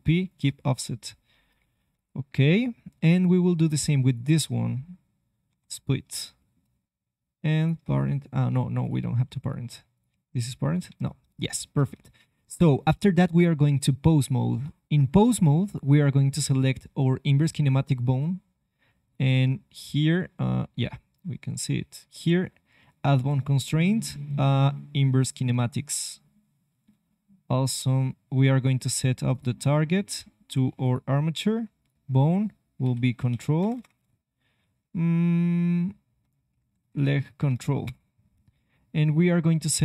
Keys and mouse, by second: 1.9 KP_3, 2.6 click, 2.9 click, 5.4 y, 10.0 g, 12.0 ctrl+Tab, 15.6-17.8 drag, 19.0-21.1 drag, 22.1-30.9 drag, 31.7-33.8 drag, 33.7 BackSpace, 33.8 BackSpace, 36.6 Up, 36.7 Up, 37.0 Up.